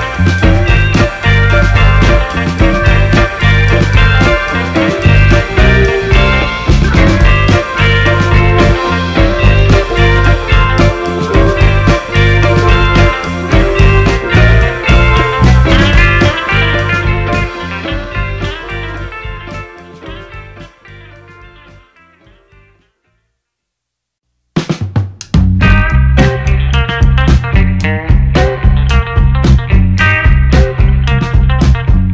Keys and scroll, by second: 0.5 space, 3.2 1, 3.5 6, 3.6 Return, 3.6 1, 6.1 1, 8.0 BackSpace, 8.2 4, 8.4 Return, 20.6 8, 20.9 Return, 22.4 space, 28.7 shift+a.